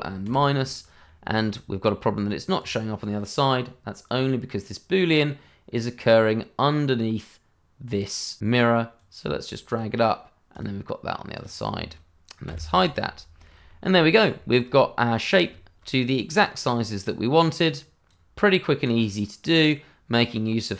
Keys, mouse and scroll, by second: 0.2 ctrl+-, 1.0 middle click, 2.5 click, 8.9 click, 12.4 h, 12.7 scroll down 1, 13.0 middle click, 13.8 shift+middle click, 14.0-14.4 scroll up 1, 14.4 shift+middle click, 14.9 middle click, 15.7 shift+middle click, 17.3 click, 18.5 middle click, 19.4 n, 20.3 click, 20.6 scroll up 1.